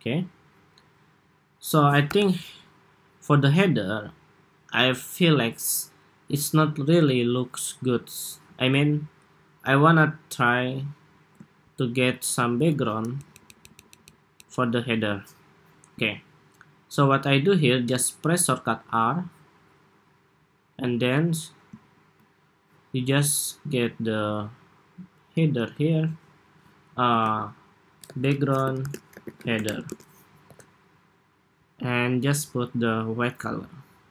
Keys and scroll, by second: 1.8 super+-, 25.3 super+g, 27.0 super+r.